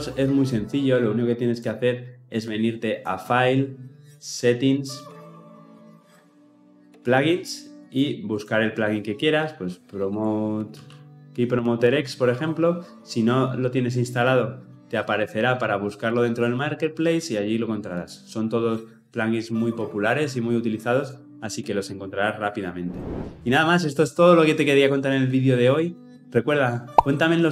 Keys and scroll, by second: 5.0 ctrl+alt+s.